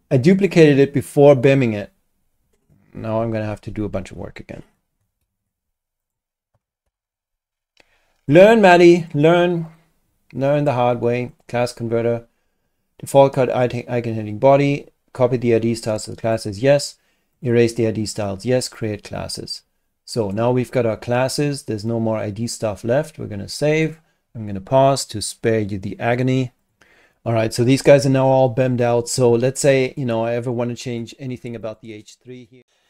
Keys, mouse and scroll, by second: 0.3 click, 5.2 ctrl+Delete, 6.0 click, 6.8 ctrl+Delete, 8.3 click, 9.0 click, 9.7 click, 11.3 click, 16.2 click, 17.3 click, 18.6 click, 20.2 click, 23.8 click, 26.6 click, 29.9 click, 31.6 click, 32.6 click.